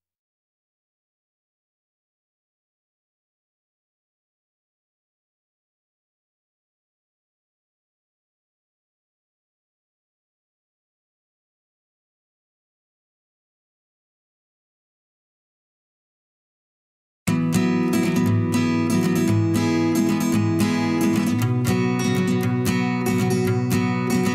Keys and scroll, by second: 20.7 ctrl+z.